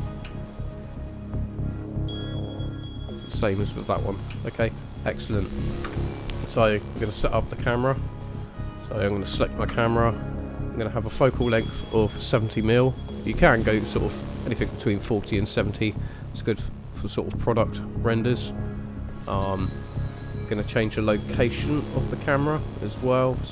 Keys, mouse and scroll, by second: 0.0-1.0 scroll down 3, 1.0 shift+middle click, 3.0 click, 4.1 scroll down 3, 4.4 shift+middle click, 4.9-5.5 scroll up 2, 5.8 KP_0, 6.7-7.3 scroll up 1, 7.3 scroll up 1, 7.6 middle click, 8.6 click, 9.7 KP_0, 22.0 click, 23.1 click.